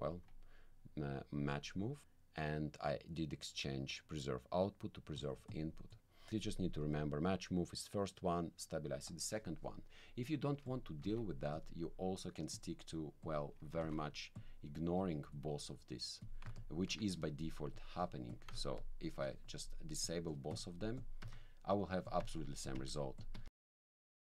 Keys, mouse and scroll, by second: 1.4 click, 5.5 click, 5.9 click, 9.9 click, 10.6 click, 11.0 alt+c, 11.5 alt+click, 12.5 click, 13.2 click, 13.8 alt+c, 14.4 alt+click, 15.0-16.4 drag, 16.6 ctrl+click, 17.7 click, 18.3 click, 18.8 ctrl+click, 20.0 click, 20.5 click, 21.0 click, 21.2 1, 22.0 click, 22.2 1, 22.6 click, 23.2 click.